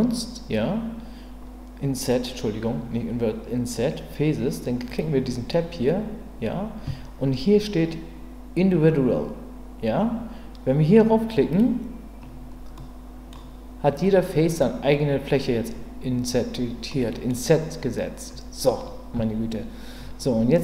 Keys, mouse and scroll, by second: 4.9 click, 11.5 click, 12.8 middle click, 17.0 middle click.